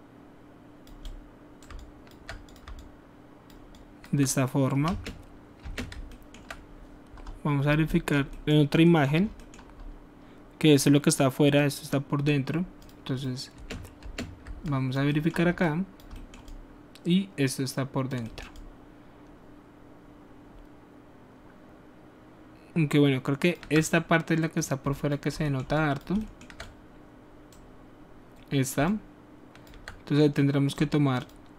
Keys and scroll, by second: 4.8 space, 5.6 space, 13.6 space, 14.0 space.